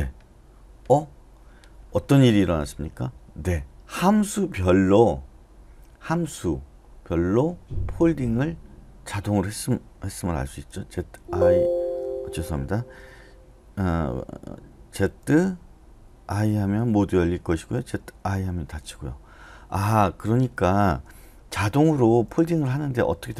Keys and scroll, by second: 11.2 ctrl+i, 15.0 typing, 16.3-18.3 typing, 21.4-23.3 typing.